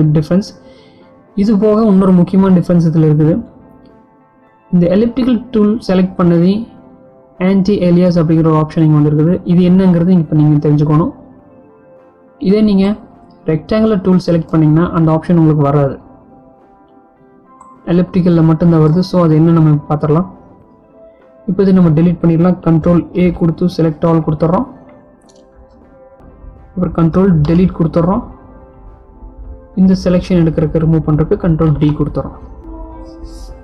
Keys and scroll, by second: 22.3 ctrl+a, 27.6 ctrl+Delete, 30.6 ctrl+d.